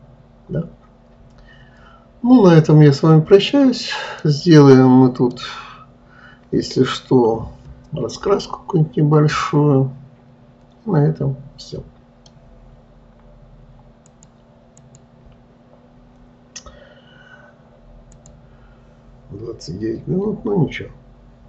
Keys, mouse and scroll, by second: 4.7-7.7 middle drag, 9.4-9.9 scroll down 1, 9.9-12.9 middle drag.